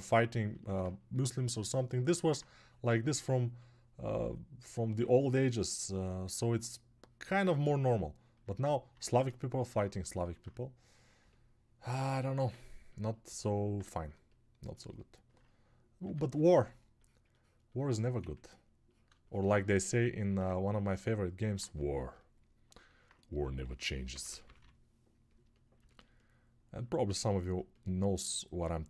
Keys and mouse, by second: 28.2-28.8 ctrl+alt+drag, 28.2-28.8 ctrl+alt+middle drag, 28.2-28.8 ctrl+alt+right drag.